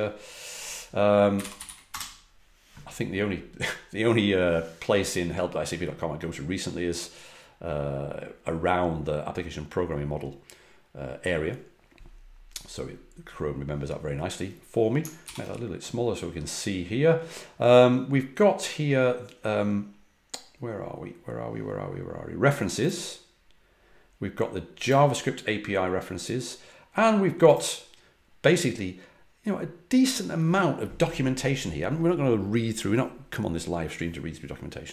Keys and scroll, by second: 1.1-2.1 typing, 15.2 super+-.